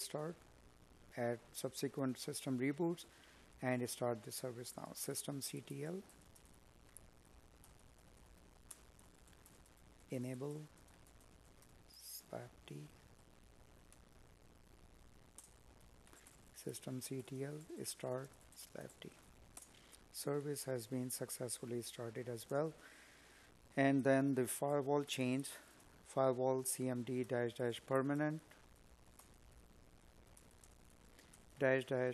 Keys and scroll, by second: 0.6 space, 3.8 space, 5.1 space, 11.5 space, 12.5 space, 19.9 space, 24.8 space.